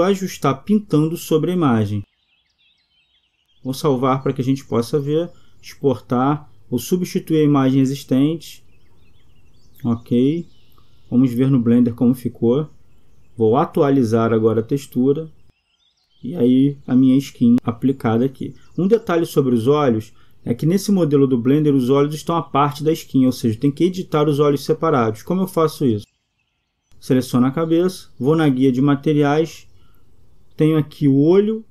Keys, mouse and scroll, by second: 15.1 click, 25.9 Escape.